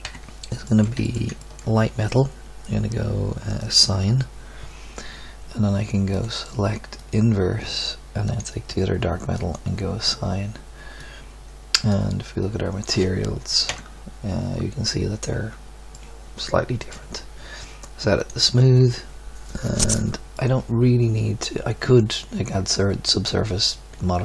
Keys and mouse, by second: 0.0 KP_3, 13.7 Tab, 18.2-20.4 drag, 21.0 click, 21.3-21.7 middle drag, 22.0-22.8 middle drag.